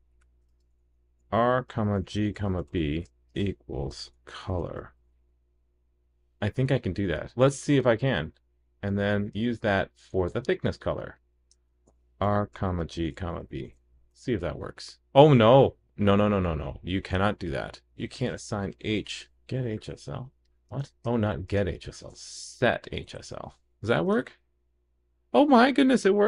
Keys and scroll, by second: 14.1 super+s, 23.6 super+s.